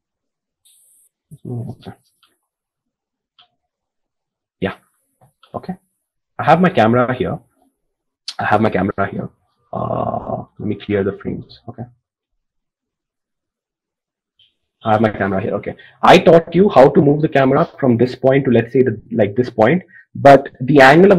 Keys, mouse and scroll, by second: 2.1 KP_7.